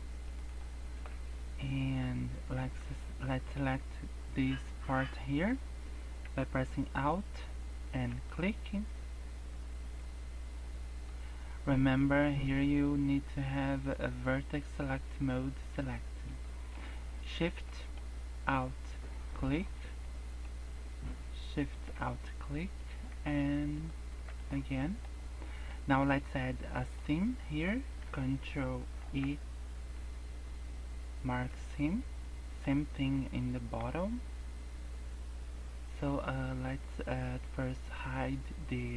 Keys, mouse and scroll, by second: 1.0-1.6 scroll up 2, 1.7 shift+middle click, 2.0-3.6 scroll up 4, 8.0 alt+click, 9.3 scroll down 4, 9.9 middle click, 11.1 scroll up 1, 16.0 scroll up 2, 16.4 shift+middle click, 16.7 scroll up 2, 17.6 middle click, 19.3 alt+shift+click, 19.6 scroll down 4, 20.0 middle click, 20.4 scroll up 1, 21.5 alt+shift+click, 22.0 middle click, 23.7 alt+shift+click, 24.3 scroll down 1, 24.4 middle click, 25.3 middle click, 26.1 middle click, 26.8 middle click, 27.0 scroll up 1, 28.9 ctrl+e, 32.2 middle click, 32.7-33.1 scroll up 1, 33.1 middle click, 34.6-35.1 scroll down 3, 35.4 scroll down 1.